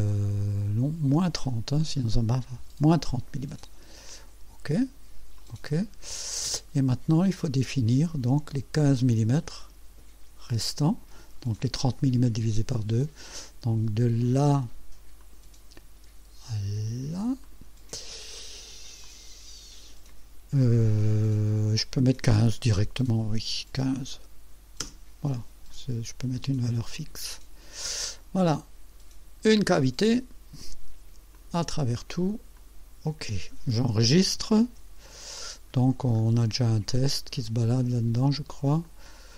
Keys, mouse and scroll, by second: 1.1 click, 2.6 KP_Subtract, 4.1 click, 5.4 click, 6.0 scroll down 1, 6.4 right click, 9.0-11.3 drag, 15.2 click, 17.4 click, 19.0 click, 23.1 KP_1, 23.4 KP_5, 24.8 KP_Enter, 26.9 click, 30.0 click, 31.3 click, 31.9 click, 32.6 click, 34.6 ctrl+s, 35.7-37.5 scroll down 10, 38.8 click.